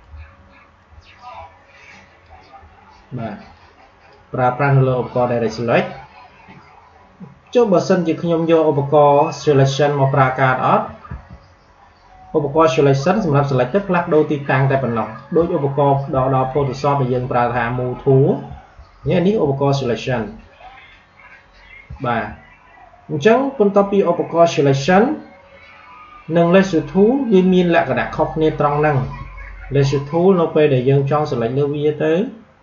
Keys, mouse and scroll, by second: 11.0 v, 12.9-15.7 drag, 15.5 scroll down 2, 16.2 alt+scroll up 1, 18.6 alt+scroll down 1, 19.1 alt+scroll up 1, 21.8 alt+scroll up 1, 21.9 alt+scroll down 1, 28.9 q, 30.9-32.6 drag.